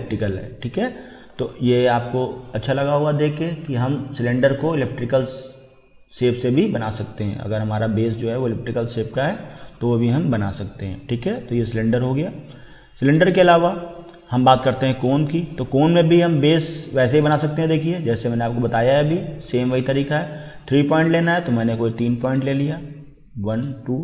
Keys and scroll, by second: 3.2 typing.